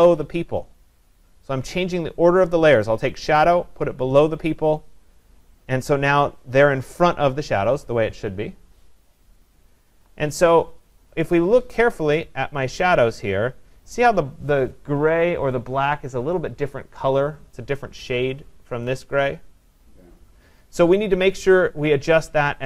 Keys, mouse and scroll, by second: 1.9 click, 4.5 click, 11.3-14.6 scroll, 12.2-17.3 drag, 14.6-17.2 scroll.